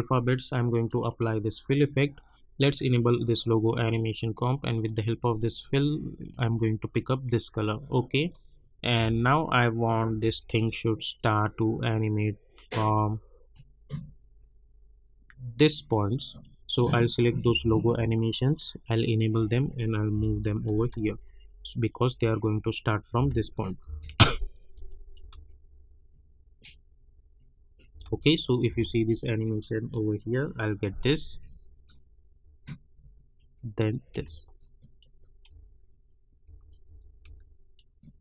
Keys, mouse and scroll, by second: 9.0 space, 10.6 click, 11.0 -, 17.2 click, 17.7 shift+click, 18.9 click, 20.1 [, 20.7 space, 23.1 space, 23.8 -, 24.8 click, 25.1 space, 27.9 space, 28.2 click, 28.6 space, 34.1 space, 35.0 click, 35.4 space, 37.7 click.